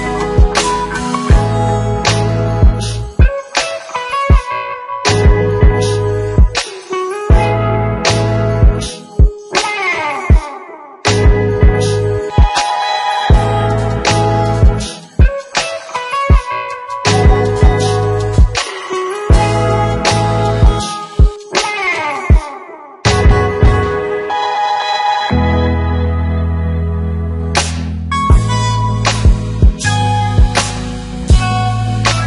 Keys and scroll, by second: 1.3 ctrl+c, 2.5 ctrl+v, 14.3 ctrl+c, 15.1 ctrl+v.